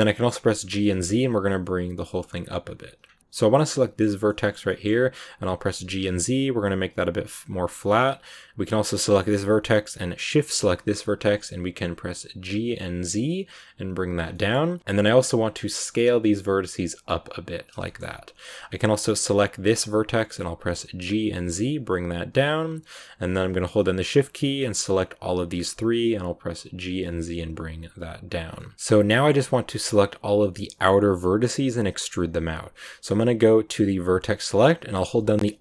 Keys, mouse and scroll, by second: 0.5 g, 3.1-4.8 middle drag, 4.8-5.6 scroll up 1, 5.6 g, 8.6 right click, 10.3 shift+right click, 10.8 g, 14.1 scroll down 2, 14.2 middle click, 14.7 s, 17.7 shift+scroll up 1, 19.5 right click, 23.6 shift+right click, 24.6 shift+right click, 26.7 g, 28.3 scroll down 2, 28.5-32.1 middle drag, 33.8 click.